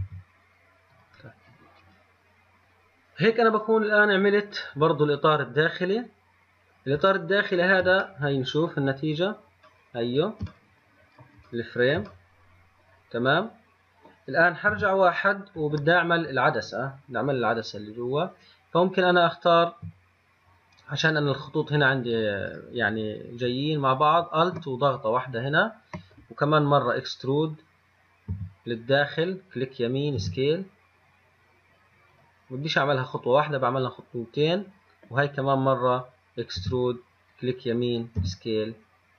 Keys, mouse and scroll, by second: 0.2 g, 6.3 scroll down 2, 7.5 shift+middle click, 8.3 scroll up 1, 8.3 middle click, 9.2 scroll down 2, 10.0-14.9 middle drag, 14.9 KP_1, 18.1 click, 19.8 alt+click, 21.0 click, 24.7 alt+click, 28.6 e, 30.4 s, 36.8 e, 38.4 s.